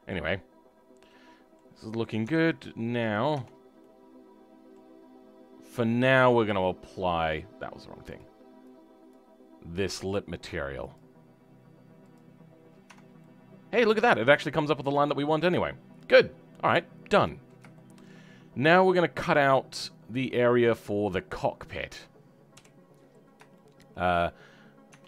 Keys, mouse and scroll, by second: 0.0-2.3 middle drag, 2.3-3.0 scroll up 3, 3.0 click, 3.7-6.4 middle drag, 6.4 click, 12.4-12.8 scroll down 2, 12.8 Tab, 13.1 middle click, 14.0-15.0 scroll up 4, 15.0-15.3 scroll down 4, 15.3-22.5 middle drag, 22.5 KP_7, 23.5 shift+middle click, 24.3-24.8 scroll down 2, 24.8 Tab.